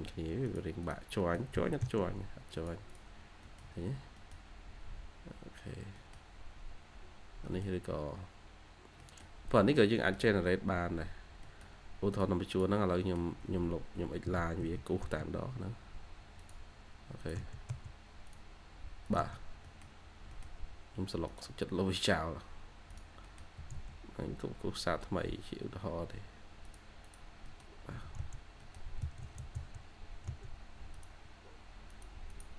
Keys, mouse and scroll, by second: 0.7 double click, 1.1 middle click, 1.4 j, 1.9 scroll up 1, 2.2-2.8 scroll, 2.8 double click, 3.1 scroll down 1, 3.3 middle click, 3.5 Escape, 3.7 Escape, 3.8 scroll down 1, 4.1 middle click, 4.4-5.2 scroll up 1, 5.2-5.8 scroll down 1, 5.8 middle click, 6.5-7.3 scroll up 1, 7.3 middle click, 7.8-8.3 scroll down 1, 8.3-8.7 scroll up 1, 8.9 middle click, 10.1 scroll down 1, 10.7-11.4 scroll up 1, 11.4 middle click, 12.7 scroll down 1, 12.9 middle click, 13.4 Escape, 13.6-14.0 scroll up 1, 14.1 typing, 14.9 scroll up 1, 15.3-16.0 typing, 19.2 scroll down 1, 19.6 middle click, 19.8-20.2 scroll down 1, 20.2 middle click, 23.1 middle click, 23.5-24.3 typing, 24.0-24.7 scroll up 2, 26.9 double click, 27.4 middle click, 27.9-29.3 typing, 28.5 middle click, 32.2 double click.